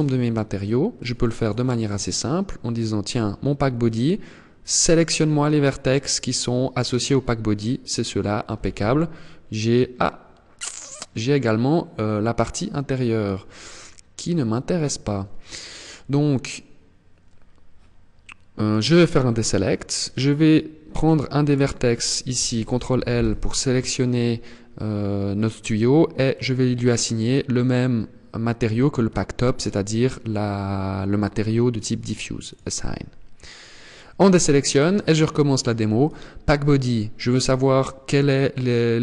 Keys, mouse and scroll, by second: 0.5 click, 0.9 click, 1.3 click, 2.2 click, 4.3 click, 8.3 z, 12.5-13.0 scroll up 3, 13.0-14.3 scroll down 2, 18.1 click, 20.9 right click, 22.5 ctrl+l, 25.8 click, 31.9 click, 33.3 click, 34.1-34.9 scroll down 1, 35.5 click.